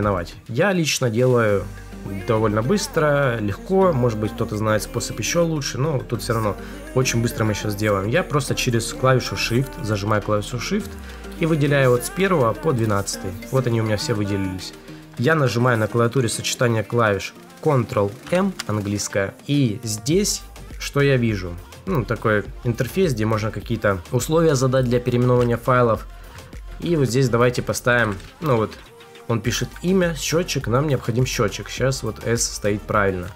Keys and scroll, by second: 18.1 ctrl+m, 26.2 Left, 28.0 Right.